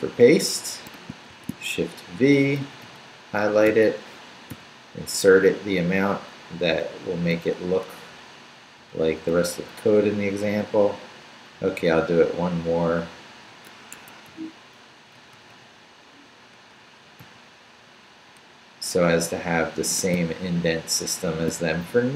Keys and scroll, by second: 1.3 shift+v, 1.6 shift+Down, 2.4 Down, 3.4 shift+Down, 3.7 shift+., 8.9 Down, 13.9 Escape, 14.3 u, 14.9 Up, 18.3 Down, 20.1 shift+Down, 21.3 shift+v.